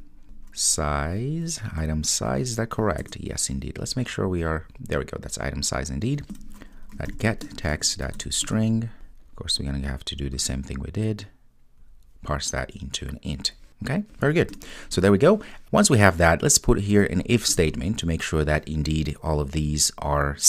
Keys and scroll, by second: 3.0 Return, 7.5 Return, 17.5 Return, 18.9 Return.